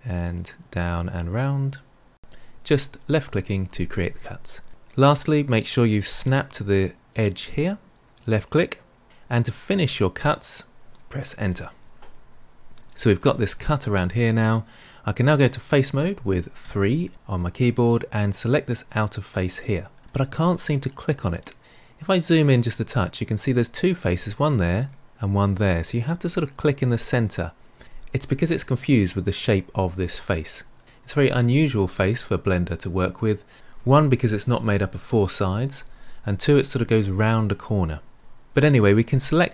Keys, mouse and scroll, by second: 16.6 3, 18.2 click, 18.9 click, 19.8 click, 20.0 click, 20.3 click, 20.8 click, 21.9-23.2 scroll up 4, 23.2 click, 24.7 click, 25.6 click, 26.4 click, 27.0 click, 39.0 click.